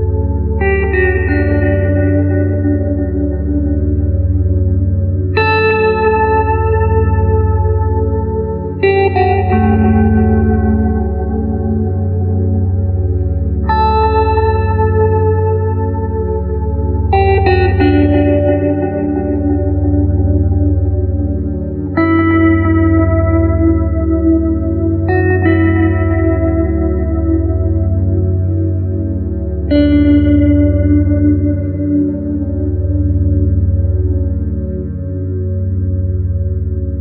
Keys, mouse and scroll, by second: 2.9-8.2 middle drag, 9.8-14.7 middle drag, 14.7 click, 19.9-22.5 middle drag, 22.5 click, 29.4 click, 31.4-34.3 middle drag, 35.7-37.0 middle drag.